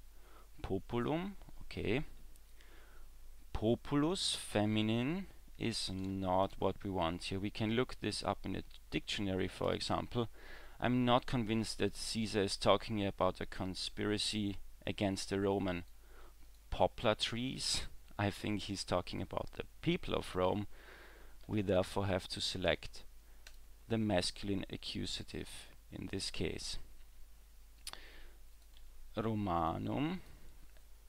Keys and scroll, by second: 28.8 w.